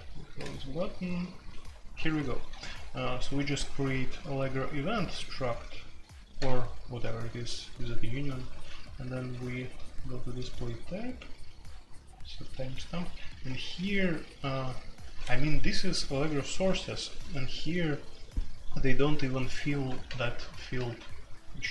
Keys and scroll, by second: 0.0-0.4 typing, 1.5-5.0 typing, 8.5-9.9 typing, 11.7-14.8 typing, 16.8-17.5 typing, 20.1 super+k, 20.2 super+k, 20.7 j.